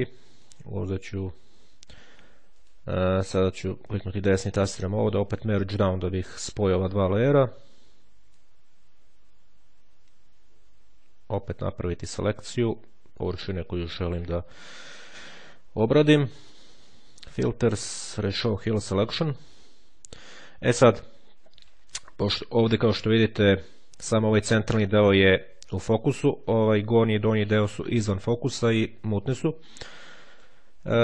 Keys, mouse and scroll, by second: 0.3 click, 2.4 click, 3.3 right click, 5.2 click, 7.1-7.5 ctrl+scroll up 2, 8.3-12.5 drag, 13.0-14.5 drag, 17.1 click, 18.1 click, 20.9-22.0 drag, 22.2-22.7 ctrl+scroll down 2, 29.9 click.